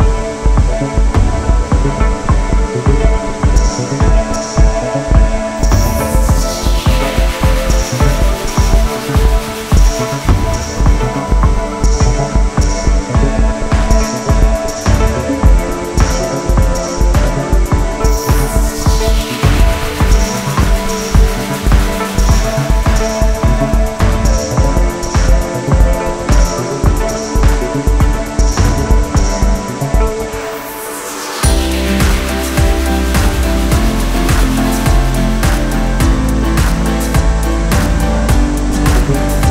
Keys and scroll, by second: 23.7 ctrl+z, 38.2 ctrl+alt+shift+e.